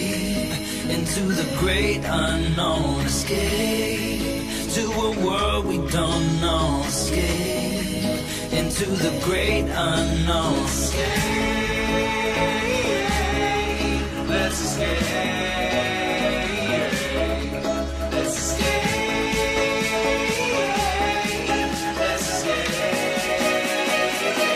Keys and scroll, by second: 13.7 Escape, 21.3 Tab.